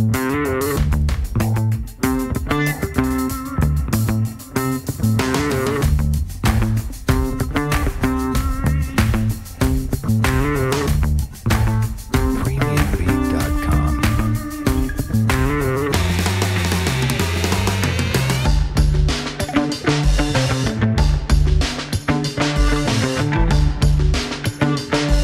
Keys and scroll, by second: 10.2 w, 18.7 ctrl+z, 20.5 ctrl+z, 24.6 w.